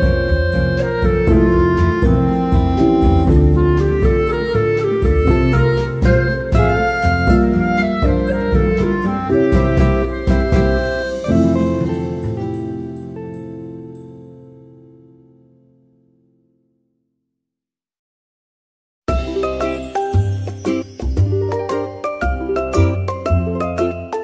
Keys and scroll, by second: 1.0 u, 1.9 Tab, 3.9 ctrl+z, 4.9 ctrl+z, 6.8 Tab, 9.1 ctrl+z, 17.8 ctrl+z.